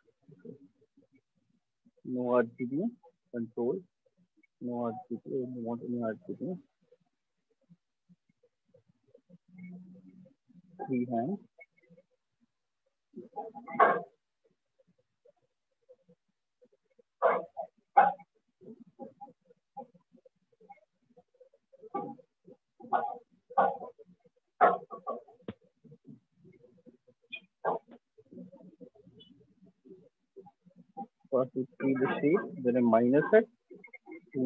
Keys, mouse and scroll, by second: 0.3 click, 3.7 ctrl+click, 9.2-10.1 ctrl+drag, 11.5-15.9 ctrl+drag, 16.9 ctrl+click, 19.9 ctrl+click, 21.1 click, 23.9 ctrl+click, 25.3 ctrl+click, 27.4 click, 32.4 click.